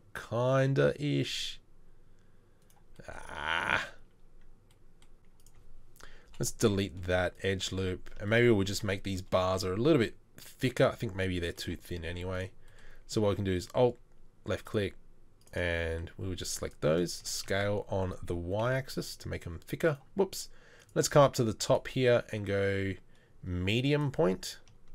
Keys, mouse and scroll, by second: 6.3 Delete, 17.2 s.